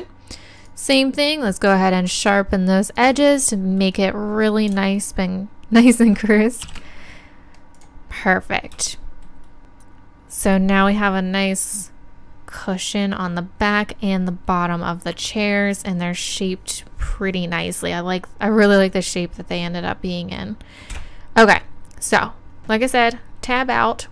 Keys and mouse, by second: 1.6-6.6 right drag, 6.6 shift+e, 7.8-9.4 drag, 13.3 middle click, 21.0 Tab.